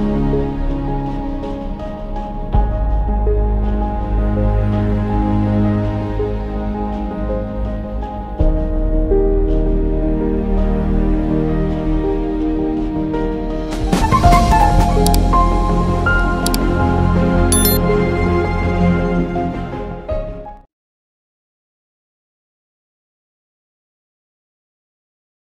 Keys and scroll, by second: 11.1 ctrl+z, 16.2 [, 16.3 [, 16.4 [, 18.9 ctrl+z, 20.1 ctrl+=.